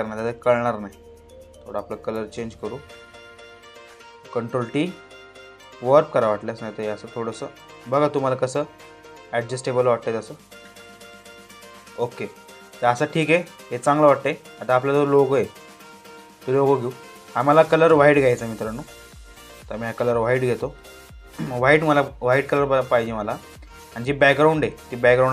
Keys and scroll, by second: 3.8 ctrl+t.